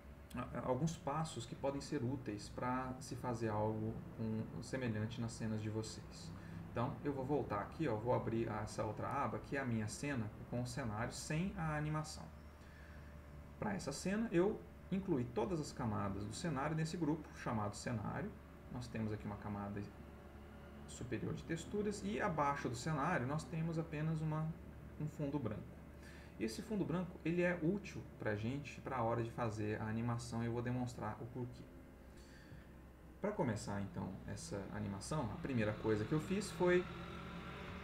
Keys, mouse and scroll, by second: 3.9 click, 4.5 ctrl+middle click, 8.0 click, 10.1-11.2 middle drag, 14.5 click, 16.5 click, 18.7 click, 22.7 click, 30.3 click.